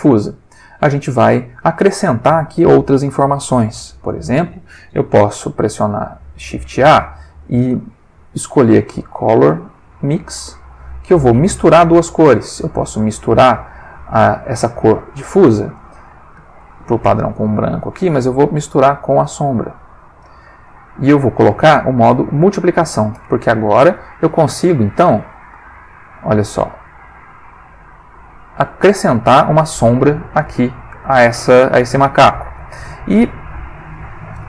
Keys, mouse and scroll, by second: 0.3 middle click, 6.4 shift+a, 10.5 click, 12.5 click, 13.1-14.5 drag, 18.6-19.9 drag, 20.6-22.3 drag, 25.2 click, 27.1 click, 28.0 click, 28.6-29.1 drag, 29.3 click, 32.7-33.9 drag.